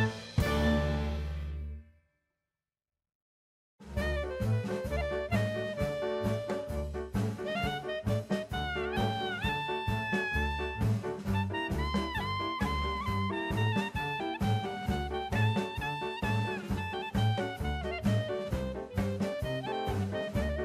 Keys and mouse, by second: 0.4 KP_1, 1.3-2.8 drag, 4.1 click, 5.0 click, 6.3 middle click, 7.8 click, 8.7 middle click, 9.8 middle click, 13.8 click, 14.9 middle click, 15.6 click.